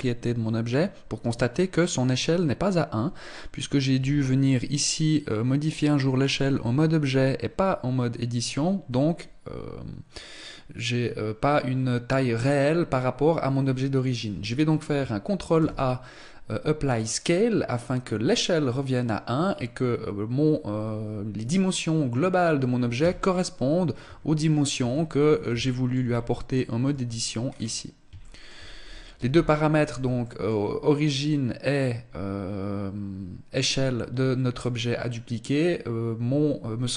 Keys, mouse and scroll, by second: 3.6 s, 11.8 scroll up 1, 15.2 ctrl+a, 22.6 Tab, 23.6 a, 24.4 Tab, 24.9-25.6 scroll up 2, 25.6 Tab, 25.6 shift+middle click, 25.6-25.9 scroll up 1, 26.5 Tab, 27.0-27.6 scroll down 4, 27.6 shift+middle click, 28.8 n, 29.2 scroll down 1, 29.6 shift+middle click, 36.2 click.